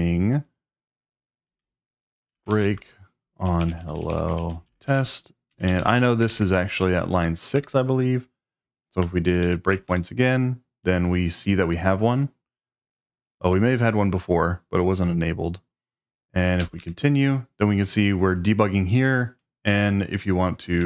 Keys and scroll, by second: 1.5-7.3 typing, 7.5 Return, 9.3 Up, 9.4 Up, 9.9 Return, 16.6 c, 20.6-20.8 typing.